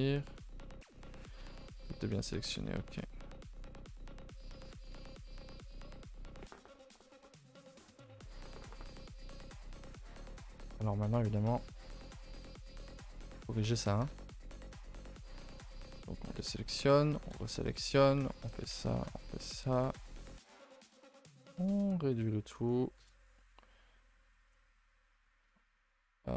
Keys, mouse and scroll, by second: 0.9 middle click, 1.4 a, 1.5 a, 1.9 middle click, 2.6 ctrl+z, 2.8 ctrl+z, 3.0 middle click, 3.6 a, 3.8 a, 3.9-5.0 middle drag, 5.0 a, 5.2 a, 5.5 3, 5.7-8.8 middle drag, 13.4 middle click, 13.7-14.1 scroll up 1, 14.1-15.7 shift+middle drag, 15.7 alt+click, 16.6 h, 17.3 l, 18.2 alt+h, 18.9 alt+shift+click, 19.4 middle click, 19.9 s, 21.5 s, 22.5 middle click, 23.0 KP_0, 24.6 ctrl+z, 25.0 ctrl+z, 25.5 ctrl+z.